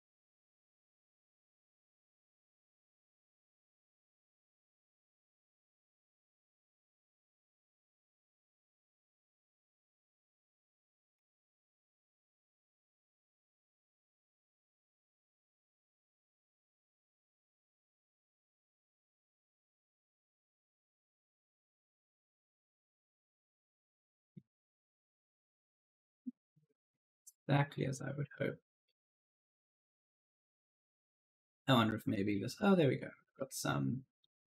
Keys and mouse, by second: 0.1 click, 1.2 click, 4.7 click, 6.1 click, 10.3-11.4 typing, 10.3 right click, 11.3 click, 18.4 click, 20.6 click, 23.3-25.8 typing, 23.3 right click, 24.7 right click, 26.0 click, 31.3-32.1 typing, 31.3 right click, 32.4 click, 34.2-34.5 typing, 34.3 right click.